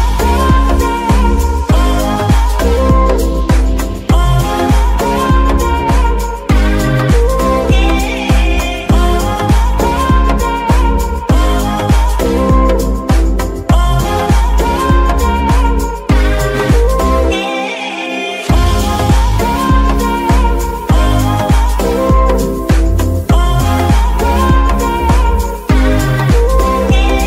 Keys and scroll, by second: 0.2 KP_1, 0.3 KP_8, 0.4 KP_0, 0.6 Return, 1.6 KP_9, 1.8 KP_0, 2.1 Return, 3.5 KP_1, 3.6 KP_8, 3.8 KP_0, 4.0 Return, 11.2 KP_9, 11.4 KP_0, 11.4 Return, 12.5 KP_9, 12.8 KP_0, 13.3 Return, 14.5 KP_Subtract, 14.7 KP_9, 14.8 KP_0, 15.0 Return, 24.7 z.